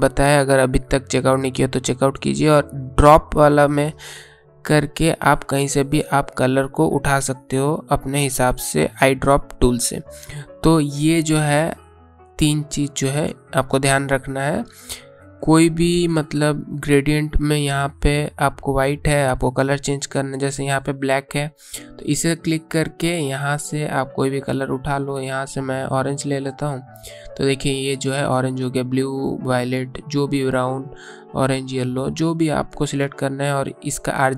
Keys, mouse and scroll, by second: 1.8 click, 5.4 click, 20.5 click, 25.7 click.